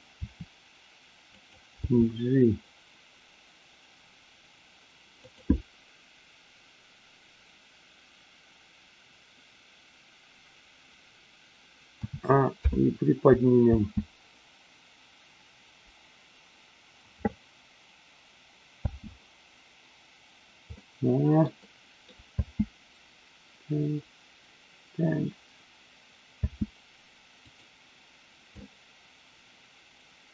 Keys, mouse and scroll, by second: 0.2 r, 1.3 click, 1.7 g, 5.2 click, 12.0 a, 12.6 i, 13.6 space, 18.8 space, 20.8-21.5 middle drag, 21.6-22.1 middle drag, 22.3 space, 26.5 space, 27.3 click, 28.5-30.3 middle drag.